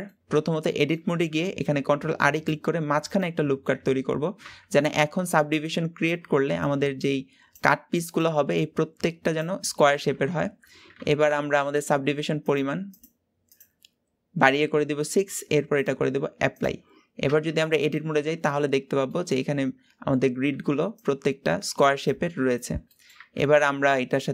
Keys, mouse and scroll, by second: 0.3 Tab, 0.7 middle click, 1.6 ctrl+r, 3.5-4.2 scroll up 1, 10.9 Tab, 12.4-17.3 drag, 17.3 Tab, 17.8-19.3 middle drag, 19.3-22.2 scroll up 5, 22.3-22.9 scroll down 6, 22.9 middle click, 23.2 Tab.